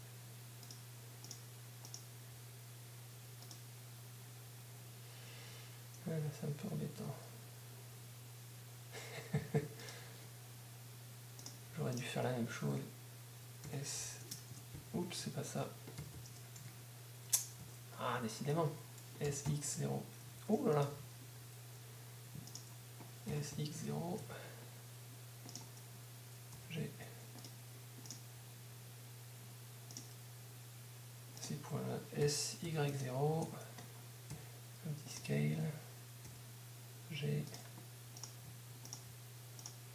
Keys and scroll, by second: 4.1 g, 8.0 g, 14.5 Caps_Lock, 18.0 typing, 28.1 g, 33.7-34.5 typing, 36.0 s.